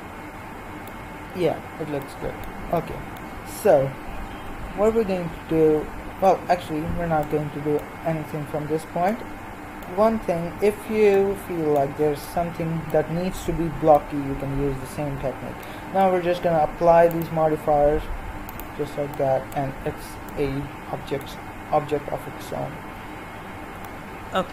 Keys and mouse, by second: 2.1 middle click, 17.2-20.5 drag, 20.5 middle click.